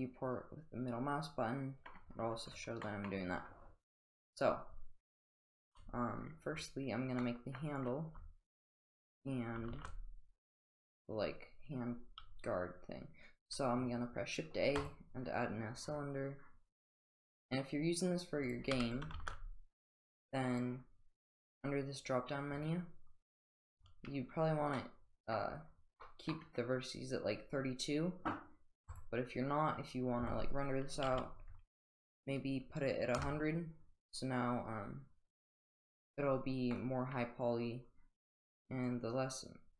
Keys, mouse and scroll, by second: 2.8 middle drag, 7.2-7.5 middle drag, 9.7 shift+a, 18.4 click, 18.7 x, 19.3 shift+a, 22.6 click, 24.7-25.4 drag, 25.5 middle click, 28.9-33.6 drag, 31.1 0, 36.7-37.1 middle drag, 38.8-39.7 drag.